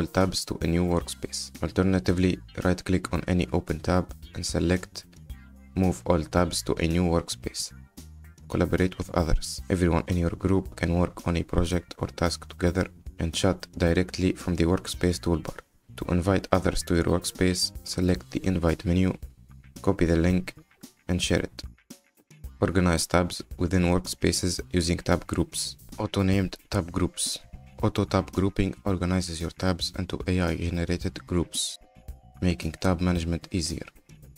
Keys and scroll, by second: 13.8 ctrl+t.